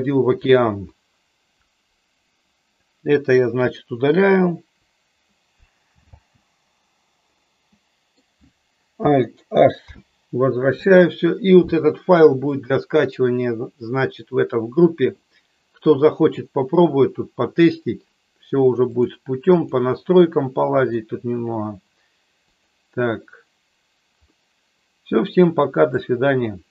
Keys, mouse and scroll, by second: 4.8 Delete, 5.9 space, 6.1 space, 7.4-8.2 middle drag, 9.9 alt+h, 12.6 middle click, 18.9-19.3 drag, 19.6 click, 22.6 click, 24.4-26.1 middle drag.